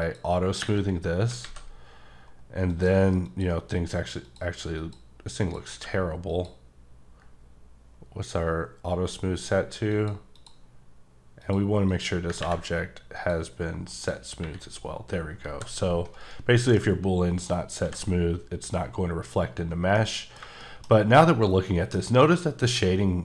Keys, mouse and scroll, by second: 0.0 click, 1.0 scroll up 2, 1.4 alt+a, 2.7 click, 3.3 click, 4.8 click, 5.0 click, 5.5 click, 5.7 q, 6.3 click, 10.3 click, 10.4 click, 11.4 click, 11.9 click, 13.1 click, 14.1 click, 15.0-15.5 scroll down 1, 15.5 g, 16.2 right click, 17.8 h, 19.9 middle click, 20.9 scroll up 2, 21.7 scroll down 1, 22.4-23.2 scroll down 3.